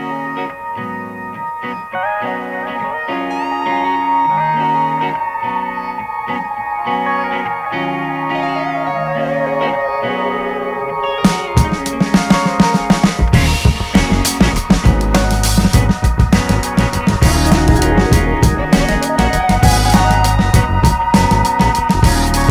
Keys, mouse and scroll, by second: 2.5 middle click, 2.8 KP_7, 3.2 g, 4.1-5.5 middle drag, 5.5 click, 6.1 click, 6.3 middle click, 6.9-7.4 scroll up 1, 7.4-8.6 drag, 8.6-10.0 middle drag, 10.0 click, 10.5 middle click, 10.9 click, 11.1 middle click, 11.7 click, 12.2 middle click, 12.8-14.4 drag, 14.4 middle click, 15.0 click, 15.8 middle click, 16.1 shift+click, 16.4 middle click, 16.8 shift+click, 16.9-18.0 middle drag, 18.0-19.9 drag, 19.9 middle click, 20.3 click, 21.1 middle click, 21.9 shift+click, 22.2 middle click.